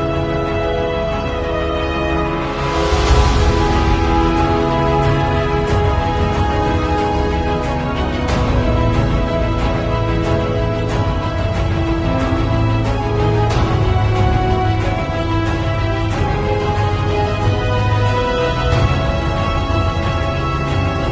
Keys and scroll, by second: 1.1 ], 3.1 [, 5.2 z, 6.8 v, 7.2 z, 8.2 space, 10.7 space, 14.3 x, 14.5 alt+Delete, 15.0 alt+x, 15.0 alt+Delete, 15.8-20.2 typing.